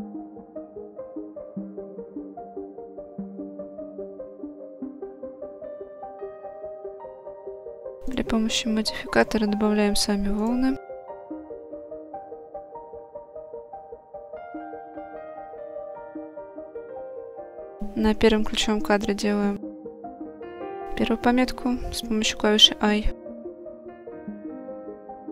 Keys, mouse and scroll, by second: 0.2 Tab, 0.8 right click, 2.7 click, 3.6 right click, 4.3 click, 5.1 click, 6.0 Tab, 6.5 shift+middle drag, 6.5-6.8 shift+drag, 7.5-9.3 drag, 12.9-15.6 drag, 15.6 ctrl+z, 17.2 click, 23.5 i, 25.0-25.3 drag.